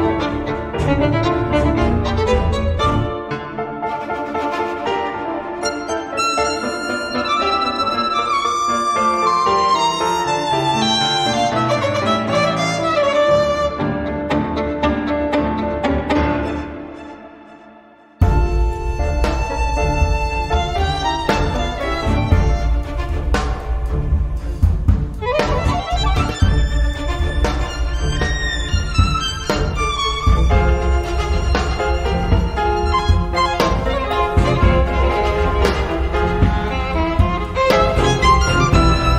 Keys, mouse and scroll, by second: 0.1 click, 1.3 click, 2.9 click, 4.3-5.4 drag, 5.8 click, 6.3-9.0 drag, 9.7 click, 11.4-12.9 ctrl+drag, 13.1-15.1 ctrl+shift+drag, 17.4 ctrl+click, 18.9 ctrl+click, 20.3 ctrl+click, 21.9 click, 23.1 click, 24.0-25.7 drag, 25.8-26.1 scroll down 1, 26.3-26.6 scroll up 1, 27.8 ctrl+click, 29.2 ctrl+click, 29.7 ctrl+click, 31.1 ctrl+click, 32.3 click, 33.9 click, 34.9 click, 35.4 click, 36.1-39.1 drag.